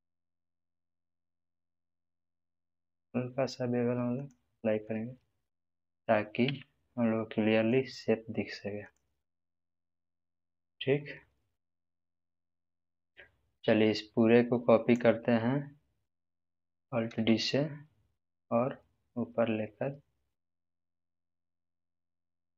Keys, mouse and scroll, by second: 4.1 ctrl+b, 4.1 click, 4.8-5.8 middle drag, 6.4 Tab, 7.1-7.8 middle drag, 8.8-15.1 drag, 17.2 alt+d.